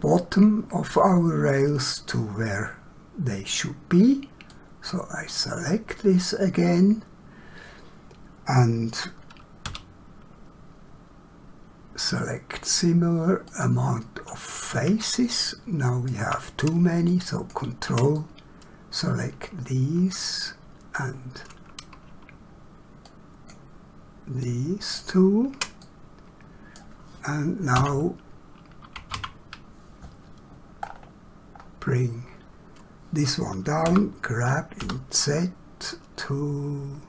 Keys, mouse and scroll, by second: 4.4 click, 9.6 q, 13.5 click, 15.2 shift+middle click, 17.1 ctrl+click, 18.2 middle click, 24.4 ctrl+click, 25.8 middle click, 30.8 scroll up 1, 33.8 g, 34.8 z.